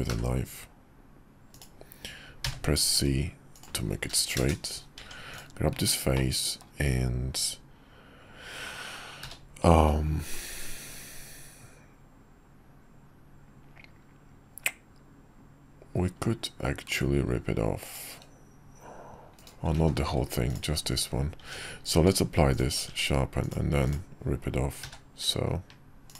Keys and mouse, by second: 0.1 k, 5.0 Tab, 5.3 click, 6.1 middle click, 9.2 q, 19.8 ctrl+z, 20.5 click, 21.4 Tab, 22.0 q, 22.9 Tab, 23.4 click, 23.8 click, 24.8 q.